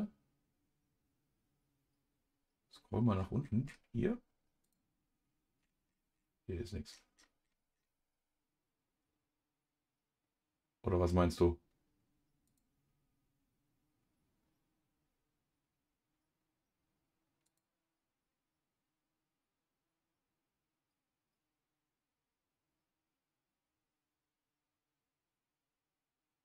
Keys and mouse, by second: 4.6 click, 12.4 click, 17.4-26.4 drag.